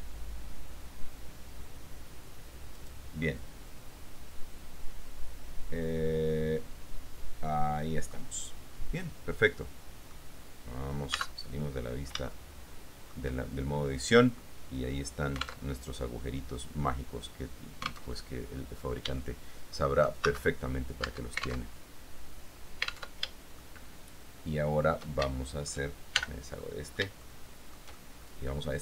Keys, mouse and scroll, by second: 3.0 click, 3.4-9.0 middle drag, 8.5-9.0 scroll down 1, 9.0-10.3 scroll down 1, 10.3-11.3 middle drag, 10.3-11.3 scroll down 1, 11.3 Tab, 11.3 click, 11.8 click, 12.2 middle click, 12.3-13.4 shift+drag, 14.6-15.6 drag, 15.8 alt+Tab, 18.3 alt+Tab, 19.4 shift+middle click, 20.4 shift+Tab, 21.2 Tab, 23.3 alt+Tab, 23.8-25.4 shift+middle drag, 25.4-26.0 shift+scroll up 2, 26.0 shift+scroll up 1, 26.3 shift+n, 26.8 shift+middle click, 27.3 shift+scroll up 2, 27.6-28.8 shift+middle drag.